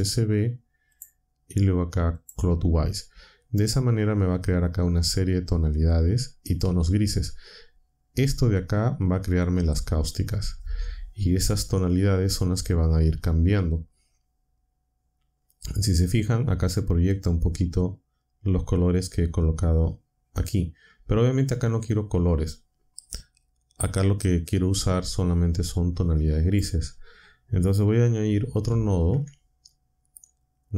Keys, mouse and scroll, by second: 0.9 click, 2.1 click, 25.7-26.7 drag, 28.6 shift+a.